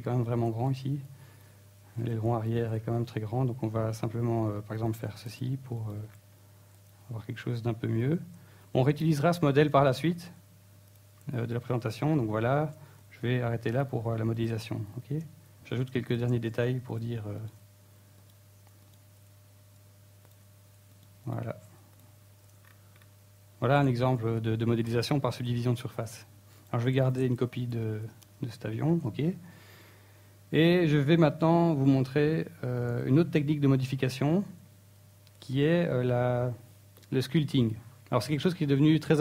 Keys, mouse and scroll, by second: 1.1 click, 1.2 a, 1.6 b, 2.2 right click, 2.3 z, 2.4 scroll down 3, 2.7 middle click, 3.2 Tab, 3.6 middle click, 4.7 shift+middle click, 5.3-5.6 scroll up 3, 5.6 Tab, 6.0 ctrl+r, 7.9 click, 9.0 ctrl+r, 10.4 click, 10.7 shift+middle click, 11.1 middle click, 11.5-11.9 scroll up 3, 11.9 shift+middle click, 12.3 ctrl+Tab, 13.3 alt+right click, 13.8 e, 14.2 right click, 14.3 s, 14.8 right click, 15.2 alt+s, 16.3 click, 16.9 right click, 17.2 right click, 17.5 x, 18.3 Tab, 18.5-19.1 scroll down 5, 19.1 middle click, 19.7 shift+middle click, 24.3 Return, 28.3 Tab, 29.0 Tab.